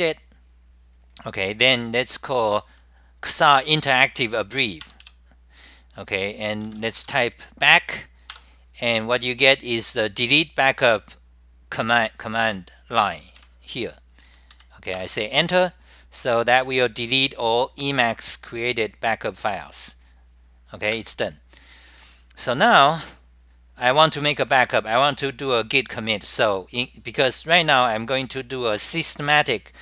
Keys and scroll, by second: 0.0-4.5 typing, 0.8 scroll up 10, 2.4 scroll up 10, 4.0 scroll up 10, 6.7-10.3 typing, 6.9 scroll up 10, 8.3 scroll up 10, 9.8 scroll up 10, 12.5-14.4 typing, 12.8 scroll up 10, 14.4 Return, 14.6 ctrl+g, 15.0 Return, 15.7-16.4 typing, 15.9 scroll up 10, 18.9 ctrl+g, 18.9 Return, 21.7-22.4 typing, 21.9 scroll up 10, 24.7-25.4 typing, 24.9 scroll up 10, 27.0-27.8 typing, 27.3 scroll up 10, 29.7-29.8 typing.